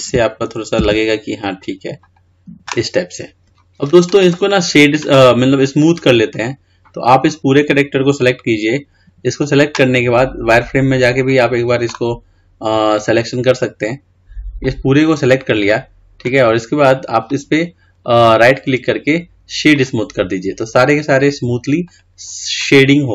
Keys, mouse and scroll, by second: 3.5 scroll up 1, 3.6-6.0 middle drag, 6.0 click, 12.3 click, 14.0 click, 14.8 click, 18.9-23.1 right drag.